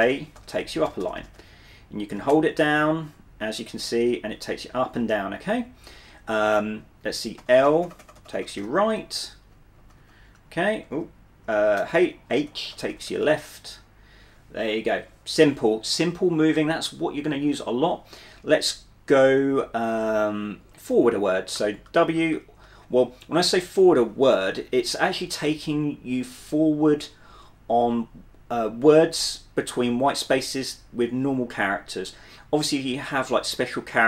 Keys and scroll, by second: 0.0-4.7 typing, 6.8 k, 7.5 l, 7.7 l, 8.1-11.0 l, 12.2 j, 12.6 k, 21.7-22.5 typing, 24.5 w.